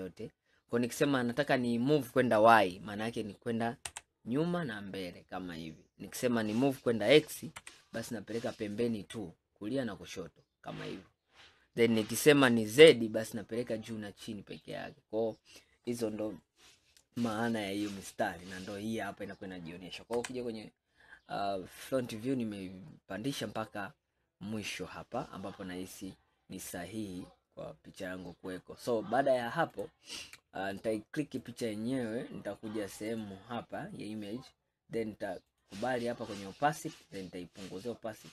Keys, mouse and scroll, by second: 17.4-20.2 middle drag, 20.2 KP_1, 22.0-22.3 scroll up 2, 23.1-26.6 scroll up 5, 26.7-27.8 scroll down 5, 28.0 scroll down 2, 29.8 click, 30.8 click, 31.4 click, 33.1 click, 35.5 click, 37.0-38.3 drag.